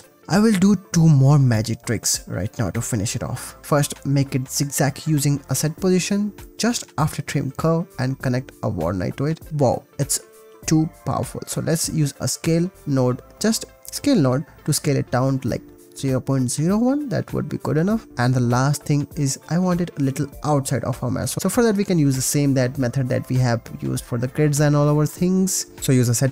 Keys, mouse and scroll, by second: 0.5-1.9 drag, 2.2 ctrl+s, 2.8-3.2 drag, 3.9 ctrl+s, 4.2 g, 4.2 shift+a, 5.8 click, 8.3 click, 9.6 click, 12.1 click, 12.7 shift+a, 14.2-18.3 drag, 18.8 click, 21.4 shift+a, 23.8 click, 24.2-25.3 drag.